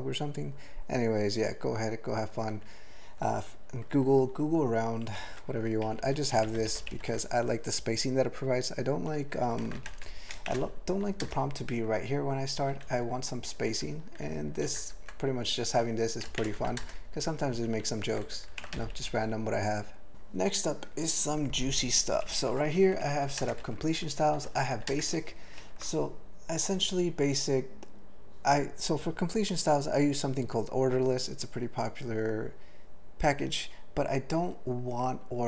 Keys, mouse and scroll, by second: 5.1 ctrl+f, 5.3 ctrl+f, 5.9 ctrl+alt+b, 6.0 ctrl+alt+f, 6.4 ctrl+alt+b, 6.5 ctrl+alt+f, 6.6 ctrl+alt+b, 6.7 ctrl+alt+f, 6.8 ctrl+alt+b, 6.9 ctrl+alt+f, 10.5 alt+shift+,, 11.2 ctrl+space, 12.6 ctrl+g, 12.8-13.5 ctrl+n, 14.2 ctrl+a, 14.6 ctrl+n, 14.8 ctrl+e, 16.4 alt+<, 16.7 ctrl+n, 16.8 ctrl+space, 16.8 ctrl+e, 17.2 ctrl+n, 17.7 ctrl+n, 18.1 ctrl+g, 20.1 ctrl+e, 22.0 ctrl+g, 22.3 ctrl+n, 22.7 alt+f, 22.9 alt+f, 23.1 alt+b, 23.4 ctrl+space, 23.6 ctrl+alt+f, 24.0 ctrl+g, 24.3 ctrl+f, 24.5 ctrl+f, 24.7 ctrl+f, 24.9 ctrl+space, 25.6 ctrl+g.